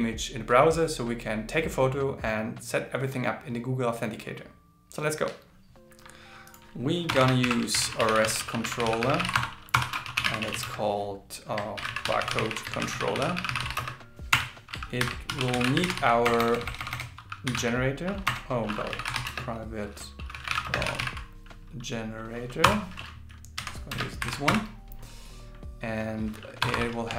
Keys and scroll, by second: 7.4 alt+l, 7.8 shift+r, 9.3 shift+c, 11.8 shift+b, 13.4 shift+c, 15.0 shift+8, 24.2 alt+8.